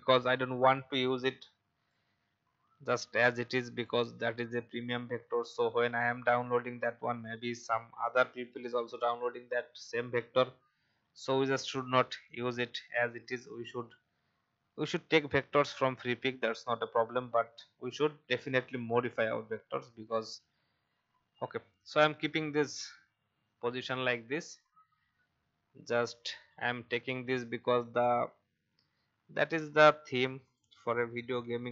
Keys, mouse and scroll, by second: 0.6-2.3 drag, 2.5-2.8 alt+scroll up 1, 3.8-10.7 drag, 10.9-11.4 alt+scroll up 1, 11.4 click, 14.0 Down, 14.5 Down, 17.1 alt+scroll up 1, 19.1 Right, 19.3 Right, 20.6 Right, 24.4 click, 31.4 ctrl+x.